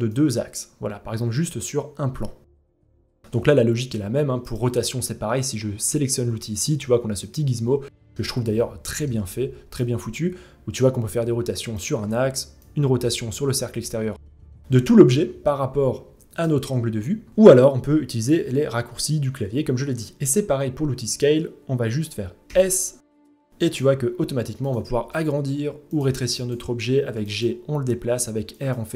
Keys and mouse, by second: 2.3 ctrl+z, 6.8-7.7 middle drag, 8.1-8.6 middle drag, 9.3-11.3 drag, 11.5 ctrl+z, 12.2-15.9 drag, 16.9 ctrl+z, 18.4 w, 22.0 s, 24.5 s, 25.7 g, 26.6 g, 27.7 r, 28.7 ctrl+z.